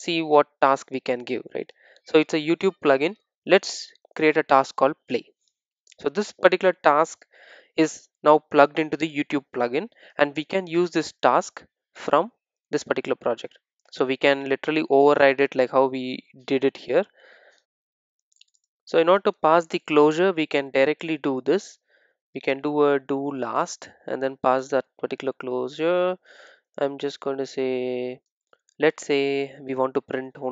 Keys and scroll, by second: 23.7 Return.